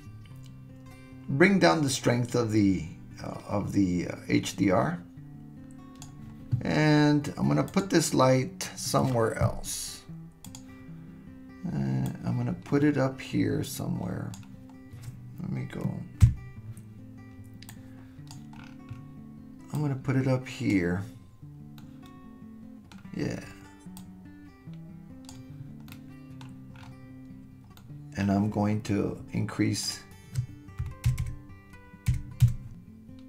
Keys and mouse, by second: 7.7 click, 10.4 click, 12.0-14.3 drag, 16.2 KP_1, 17.8 click, 19.8 click, 21.8-23.0 middle drag, 24.0-25.3 drag, 25.9-26.5 middle drag, 27.8 drag, 28.0 middle click, 30.0-31.2 drag, 31.2-33.2 right drag, 31.2 KP_0.